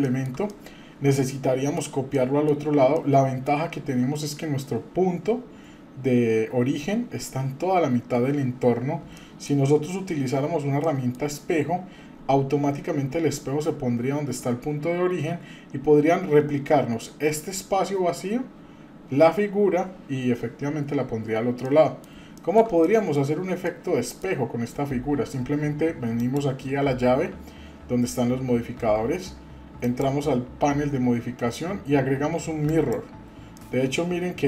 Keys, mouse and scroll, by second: 0.0 shift+middle click, 0.5-1.8 middle drag, 2.1 middle click, 2.9-3.6 middle drag, 4.0-5.5 scroll up 2, 7.8-8.5 scroll down 2, 9.1-9.6 shift+middle drag, 10.8 middle click, 21.6-22.0 middle drag, 22.3-22.6 shift+middle drag, 22.8 middle click, 23.2 scroll down 1, 23.6 middle click, 26.2 click, 29.8-32.9 drag, 33.6-34.4 middle drag.